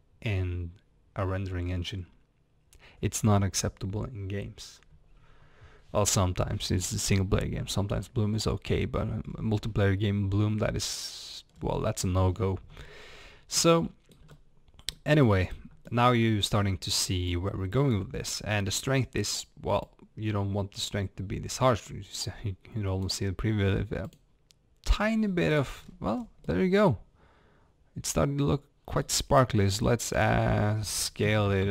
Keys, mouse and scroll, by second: 8.6 scroll down 1, 9.2 scroll up 1, 11.5 scroll down 1, 12.2 scroll up 1, 13.2 scroll down 1, 13.7-17.3 shift+middle drag, 17.3 click, 20.0-25.8 drag, 25.8 scroll up 1, 26.5-31.7 middle drag.